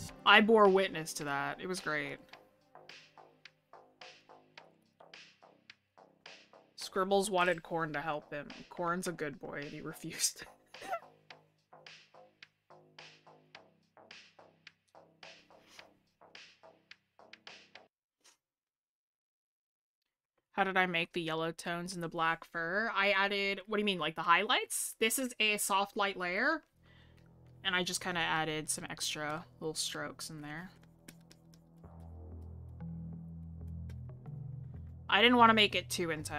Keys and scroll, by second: 16.6 scroll up 1, 17.8-18.2 scroll, 20.3 scroll down 1, 23.9 scroll down 1, 26.4-26.7 scroll up 1.